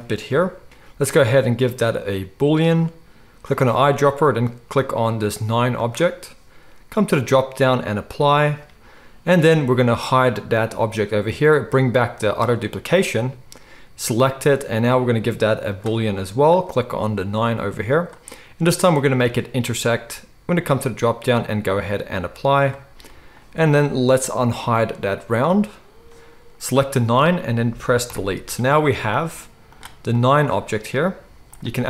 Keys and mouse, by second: 0.3 g, 0.7-3.6 drag, 3.6-7.4 middle drag, 7.4-11.0 drag, 11.0-12.6 middle drag, 12.6 click, 12.7-14.1 middle drag, 14.1-16.6 drag, 16.6-19.7 middle drag, 19.7 click, 19.7-20.7 middle drag, 20.7-25.6 drag, 25.6-26.7 middle drag, 26.7 click, 28.1 Delete, 29.7 click, 31.2 z.